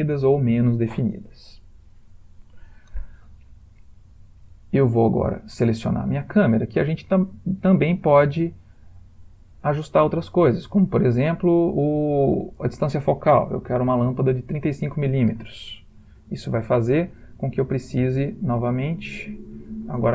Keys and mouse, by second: 2.0 ctrl+middle click, 4.5 click, 11.9 click, 19.6 click.